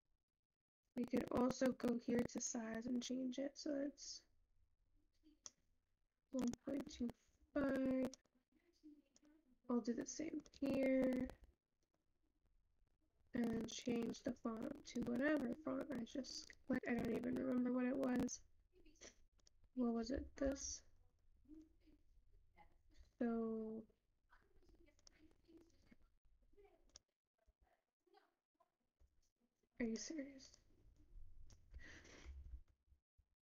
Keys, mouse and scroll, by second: 0.0-4.8 scroll down 2, 4.8-33.4 scroll down 1.